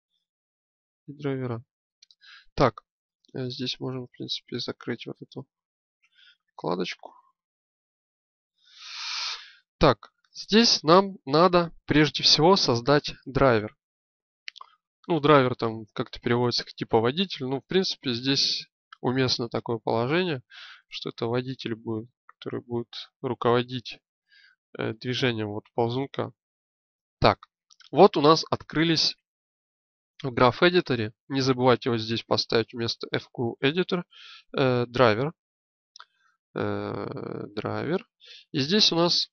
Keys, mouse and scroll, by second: 5.6 t, 7.4 click, 16.8-27.3 drag, 31.8 click, 36.2 click.